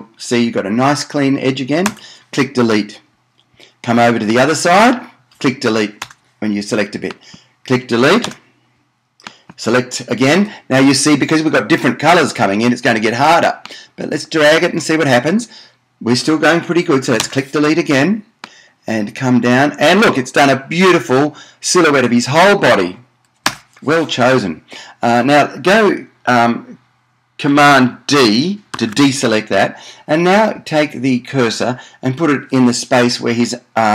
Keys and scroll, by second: 2.1 BackSpace, 6.2 BackSpace, 8.6 BackSpace, 17.4 BackSpace, 23.6 BackSpace, 28.9 super+d.